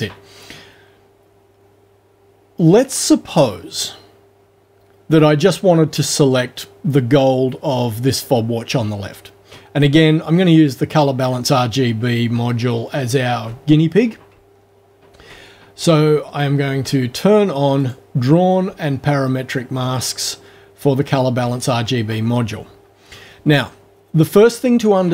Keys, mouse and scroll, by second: 12.8 ctrl+alt+scroll up 2, 14.5-15.0 ctrl+alt+scroll down 2, 15.2 ctrl+alt+scroll up 2, 16.2-16.8 ctrl+alt+scroll down 4, 17.8 click, 18.7-19.5 ctrl+alt+scroll down 2, 19.8 ctrl+alt+scroll down 2, 20.8 ctrl+alt+scroll down 2.